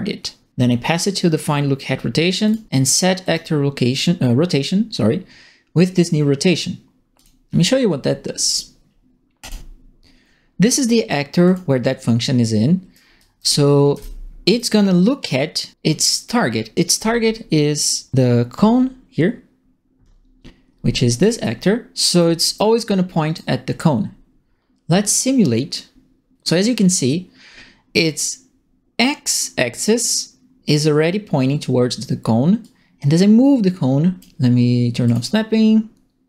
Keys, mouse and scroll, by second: 1.3 click, 2.4 click, 3.2 click, 7.1 click, 9.4 click, 11.4 right click, 12.9-14.5 right drag, 13.1-14.4 typing, 21.2 click, 22.1-23.3 right drag, 22.3 a, 32.6-34.1 drag, 35.0 click.